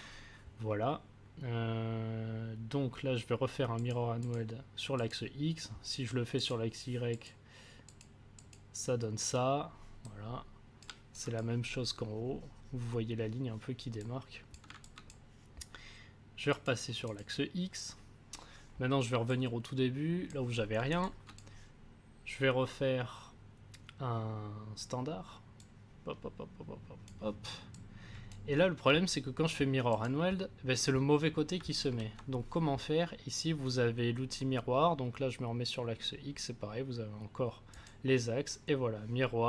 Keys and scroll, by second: 31.8 ctrl+z.